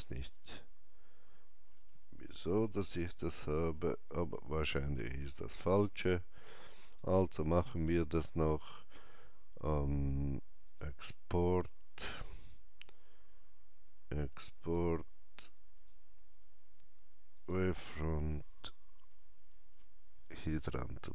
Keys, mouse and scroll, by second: 3.3 scroll up 1, 6.9 click, 10.7 click, 10.7 scroll up 1, 12.4 click, 20.3 click.